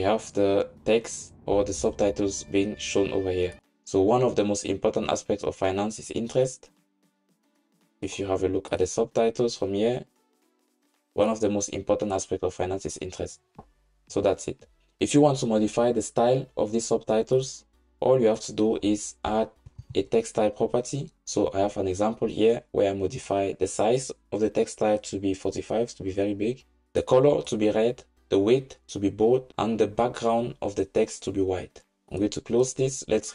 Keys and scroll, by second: 19.9 super+v.